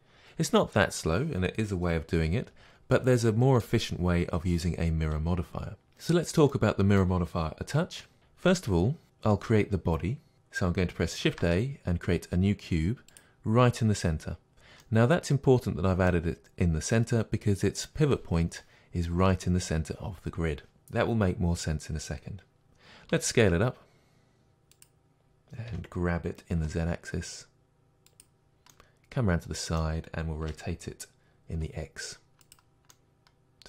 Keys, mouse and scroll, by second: 5.9-24.8 middle drag, 11.3 shift+a, 23.1 s, 24.8 click, 25.7 g, 28.1 click, 28.7-32.5 middle drag, 30.5 r, 32.5 click, 32.9-33.6 middle drag.